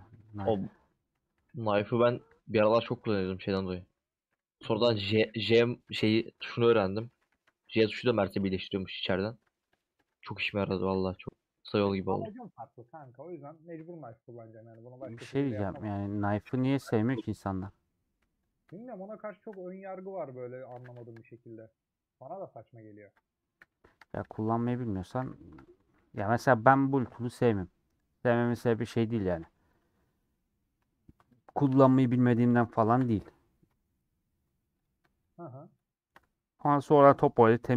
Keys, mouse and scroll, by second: 0.8 ;, 1.7 middle click, 2.3 3, 4.0 ;, 5.2 /, 5.9 Tab, 6.5 shift+click, 7.2 Tab, 9.6-11.4 drag, 11.4 middle click, 11.8 Tab, 11.9-12.9 middle drag, 12.9 3, 13.1 alt+click, 13.9 middle click, 14.0-14.5 scroll down 1, 14.5 alt+shift+click, 15.4 ;, 15.7 middle click, 16.4-16.8 scroll down 3, 16.8-18.1 middle drag, 18.7 shift+click, 19.7-20.8 middle drag, 20.8 a, 21.7-23.5 middle drag, 23.5 /, 24.1 Tab, 24.4 click, 25.1 /, 25.6 Tab, 25.7 middle click, 26.0 3, 27.0 3, 28.4 alt+click, 29.5 ;, 30.0 middle click, 30.6 2, 31.2-32.9 alt+drag, 33.8 ;, 34.9 click, 36.7-37.7 middle drag.